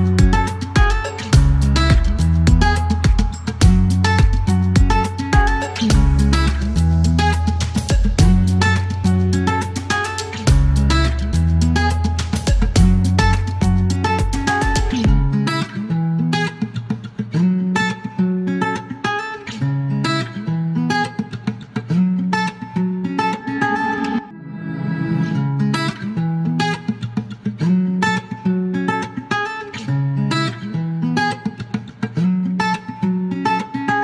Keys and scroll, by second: 1.7 KP_9, 5.6 alt+q, 7.1 alt+q, 9.4 alt+q, 9.9 alt+q, 14.3 shift+v, 20.7 space, 21.0 F1, 22.0 c, 22.3 shift+g, 22.5 Delete, 24.9 alt+e, 25.0 typing, 32.2 KP_2, 32.3 Return.